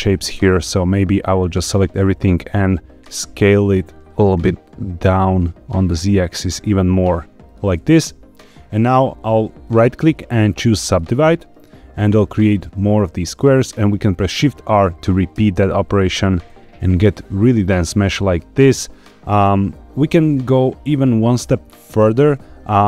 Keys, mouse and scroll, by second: 0.6 click, 2.0 s, 3.0 z, 7.4 click, 8.0-9.6 scroll down 1, 9.6-10.9 right drag, 15.3 shift+r, 16.1 shift+r, 21.9 shift+r.